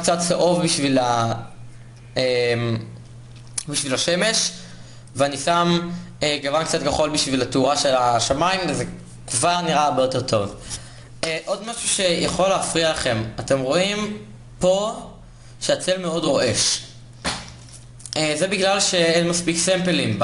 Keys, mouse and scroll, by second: 12.2-13.7 middle drag, 13.7 click, 13.9-15.5 middle drag, 15.5 click, 15.8-20.2 middle drag.